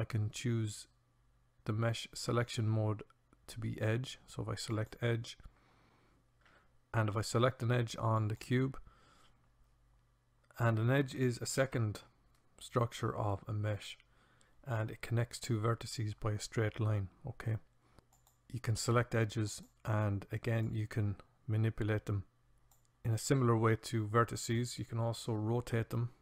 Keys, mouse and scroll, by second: 6.2 click, 6.6 a, 8.2 click, 18.1-21.2 drag, 21.4-24.7 drag.